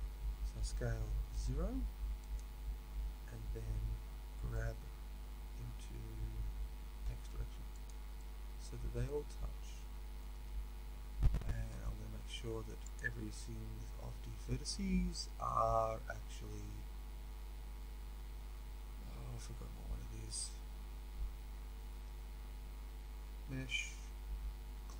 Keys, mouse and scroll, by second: 0.6 s, 4.2 g, 8.1-24.9 middle drag, 10.3 a.